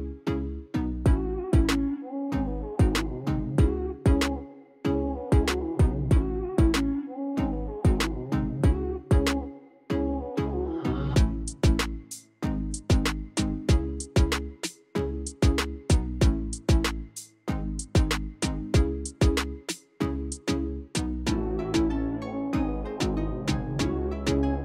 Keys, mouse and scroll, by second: 0.0 KP_5, 0.1 KP_0, 0.4 Return, 0.9 click, 1.5 KP_1, 1.7 KP_0, 2.0 Return, 2.6 click, 3.2 KP_2, 3.4 KP_0, 3.7 Return, 4.3 click, 4.8 KP_2, 5.0 KP_5, 5.1 KP_0, 5.4 Return, 9.2 Escape, 10.4 middle click, 10.6 scroll down 1, 11.8 scroll down 1, 11.8 F8, 12.0 middle click, 12.2 middle click, 12.4 middle click, 12.6 middle click, 13.1-13.4 middle drag, 14.3 click, 16.2 click, 17.6 click, 19.2 click, 20.1 click, 23.2 click.